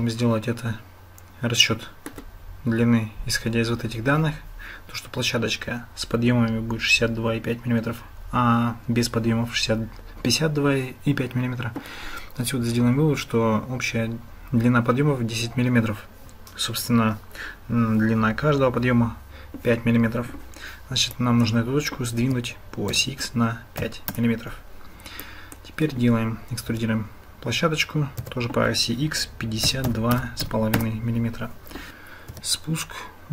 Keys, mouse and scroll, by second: 21.2 click, 22.2 g, 25.4 click, 31.9 ctrl+z, 32.3 e.